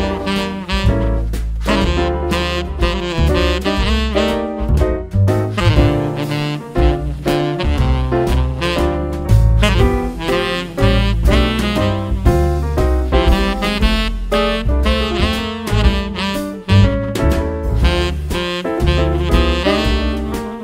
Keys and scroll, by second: 19.1 ctrl+d, 20.2 super+d.